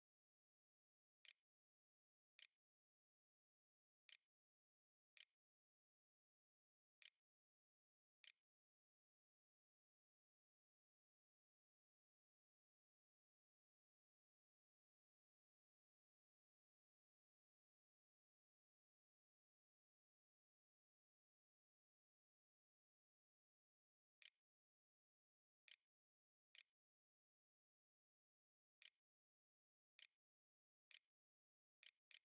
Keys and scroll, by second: 0.0-9.0 typing, 0.8 End, 1.4 Delete, 1.7 Return, 22.6-25.8 typing, 26.0 Return, 26.7 shift+Up, 26.9-32.2 typing.